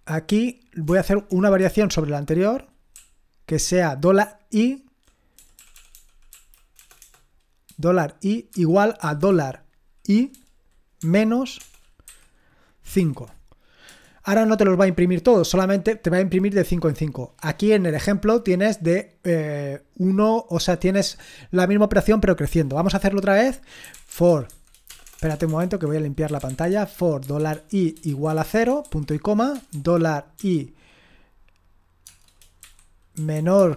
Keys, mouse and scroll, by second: 0.3 a, 2.9-5.0 Right, 5.3 Right, 5.7 Right, 5.9 Right, 6.3 Right, 6.7 BackSpace, 7.0 BackSpace, 8.5 =, 9.0 shift+4, 11.0-12.9 typing, 13.9 Return, 23.9-25.2 typing, 25.6 ctrl+l, 26.3-30.3 typing, 32.9-33.7 typing.